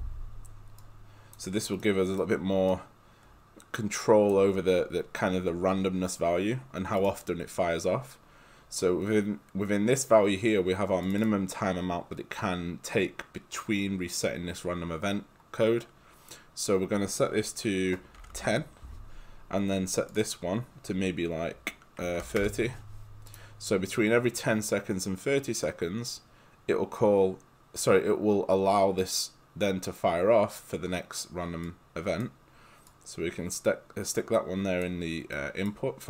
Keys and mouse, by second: 0.8 click, 2.0 right click, 2.7 click, 7.1 click, 14.7 click, 17.9-18.8 typing, 20.1 click, 21.8-22.8 typing, 23.3 click, 31.8 click, 35.3 right click.